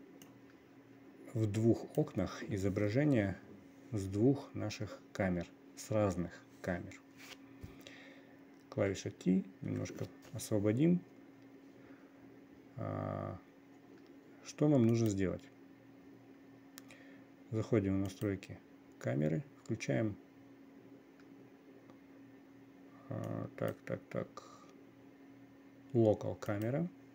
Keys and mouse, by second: 0.9-2.7 drag, 9.4 t, 10.2 t, 15.4 click, 23.9-24.3 drag, 27.0 click.